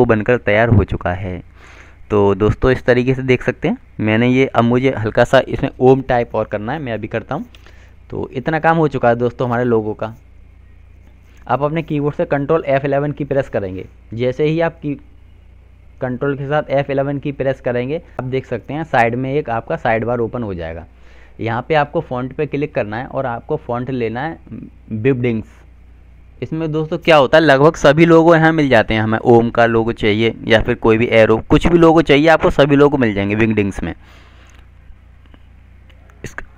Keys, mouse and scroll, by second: 3.6 F3, 6.2 click, 12.4 ctrl+F11, 22.3 click, 26.5 w, 27.3 i, 27.8 n, 33.1 click.